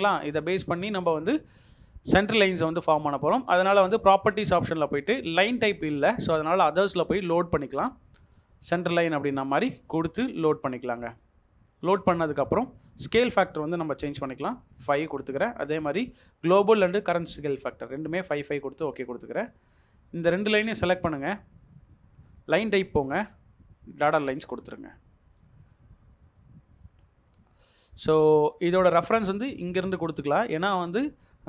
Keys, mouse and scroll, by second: 0.8 double click, 1.3 Escape, 8.3-8.9 scroll down 1, 8.9 scroll up 1, 14.4 typing, 15.8 typing, 21.3 double click, 24.5 Escape, 25.4 scroll, 25.4-25.7 scroll up 1, 30.8 Escape.